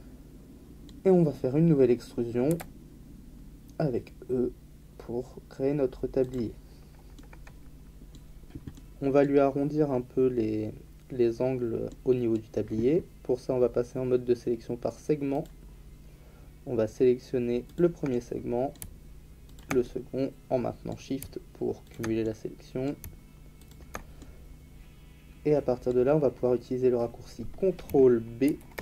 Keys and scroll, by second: 2.5 e, 28.4 ctrl+b.